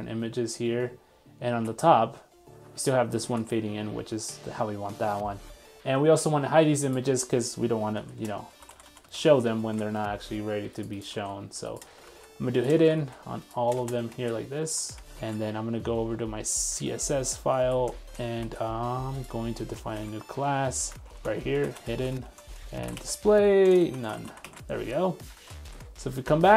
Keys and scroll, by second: 1.6 super+r, 3.3 super+r, 3.5 super+Tab, 9.6 super+s, 11.1 super+s, 12.2 super+v, 14.1 super+s, 14.9 super+z, 15.2 super+s, 24.4 super+s, 25.5 super+w, 25.9 super+Tab.